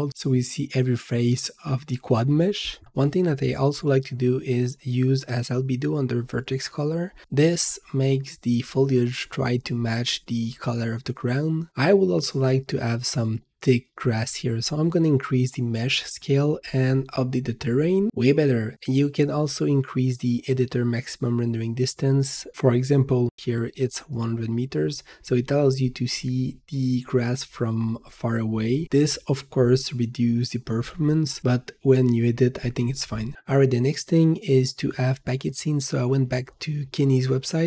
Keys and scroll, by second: 13.1 3, 14.4 Return, 16.1 ctrl+s, 18.7-19.6 typing, 20.0 Return.